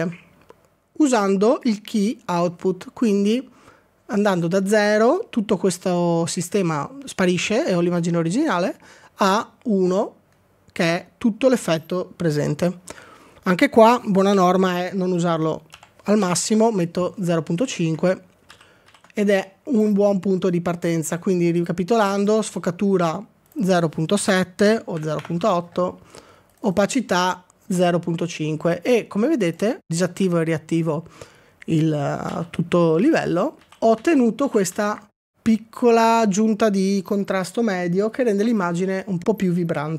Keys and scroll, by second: 14.4-16.9 typing, 18.5 ctrl+d, 18.9 ctrl+d, 24.1-26.4 typing, 28.8 typing, 29.6 Return, 32.3 ctrl+d, 33.0 ctrl+d, 33.7 ctrl+d, 34.1 ctrl+d, 34.5 ctrl+d, 34.7 ctrl+d.